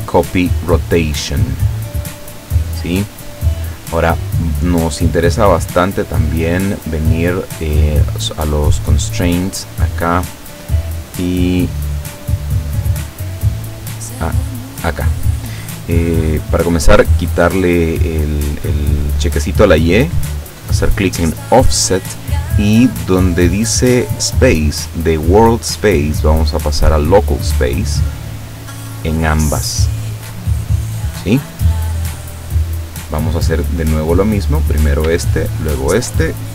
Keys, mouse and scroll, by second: 1.6 click, 5.1 middle click, 7.8 click, 9.3 right click, 10.0 right click, 14.7 click, 16.4 click, 20.7 click, 23.3 click, 25.8 click, 27.5 click, 29.6 click, 30.7 click, 34.5 right click, 35.7 shift+right click.